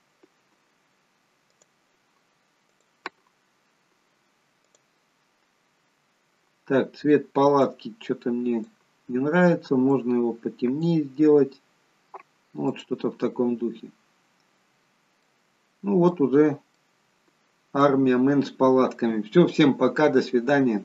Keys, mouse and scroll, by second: 1.5 click, 12.6 click, 14.2-14.9 scroll down 4, 14.9-15.2 scroll up 2, 15.2 middle click, 16.3 scroll up 2, 16.8 middle click.